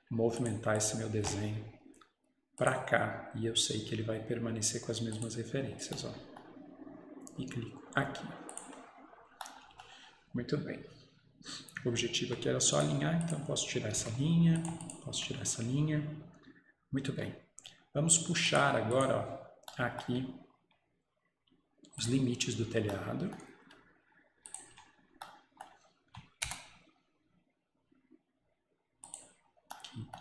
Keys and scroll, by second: 14.0 Delete, 15.2 Delete, 24.8 Escape, 26.5 Return.